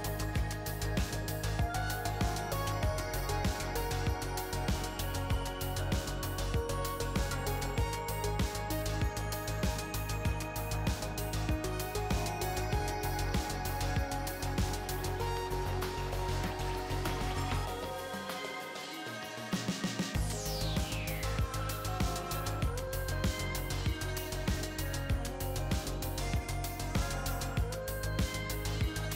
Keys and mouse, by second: 0.2-1.5 drag, 5.2-9.9 drag, 9.9-11.4 middle drag, 9.9 KP_3, 13.0-14.7 middle drag, 17.5-20.0 middle drag, 20.7-21.9 middle drag, 24.1-26.2 drag, 28.4-29.1 drag.